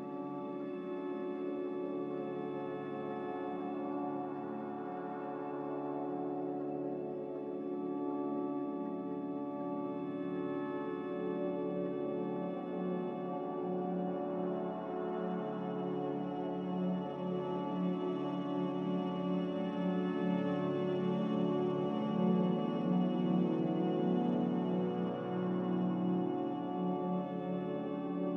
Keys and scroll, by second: 0.8 ctrl+c, 5.8 ctrl+j, 24.5 z, 25.8 Delete, 28.2 Delete.